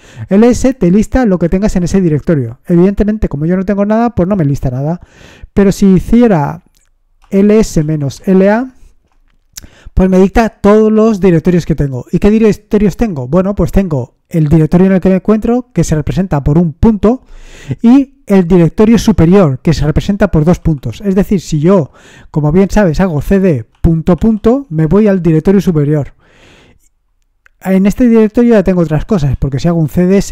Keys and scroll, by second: 0.0 Return, 0.0 typing, 6.9-8.6 typing, 8.8 Return, 22.8-24.6 typing, 28.2-30.3 typing.